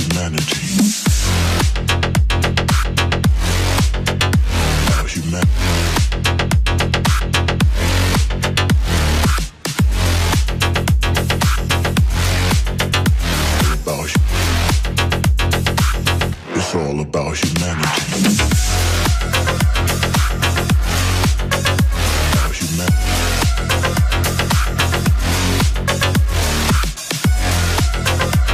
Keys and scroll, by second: 0.3 Tab, 24.5 Return.